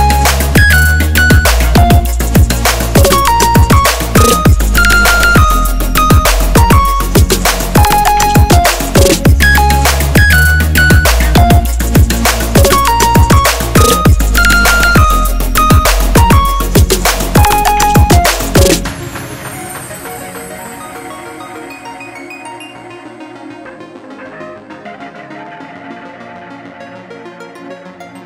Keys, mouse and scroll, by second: 0.0-1.4 drag, 3.0 click, 5.2 Tab, 6.8 click, 7.5 alt+scroll down 1, 8.0 alt+scroll up 1, 8.4 click, 9.1 shift+click, 9.9 ctrl+g, 10.5 right click, 12.1 click, 14.9-21.2 drag, 21.2 right click, 23.7 click, 25.7 right click, 27.5 click.